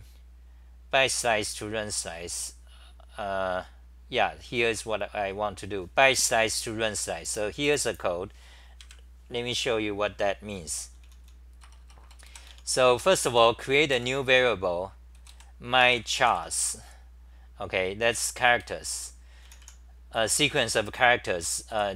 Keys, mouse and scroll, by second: 11.6 Return, 11.6-13.4 typing, 11.8 Return, 12.0 Return, 16.6 Home, 16.6 u, 18.1 g, 18.6 ,, 19.4 t, 21.5-21.9 typing.